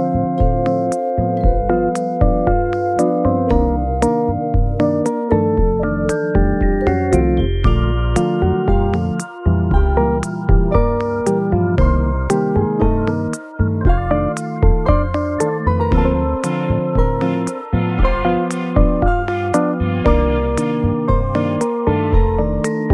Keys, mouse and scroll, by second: 1.3 g, 1.7-3.2 scroll down 9, 3.3-4.1 scroll down 5, 4.9 scroll down 1, 4.9 scroll up 2, 6.0 scroll up 1, 7.0 scroll up 3, 8.9 g, 9.6-11.0 scroll up 6, 13.2 scroll down 5, 14.4 scroll up 2, 15.5 middle click, 18.4 m, 18.4 g, 19.1-20.0 scroll up 6, 20.0-20.4 scroll up 2, 21.8 scroll down 1, 22.1 scroll, 22.1 alt+z, 22.5 middle click.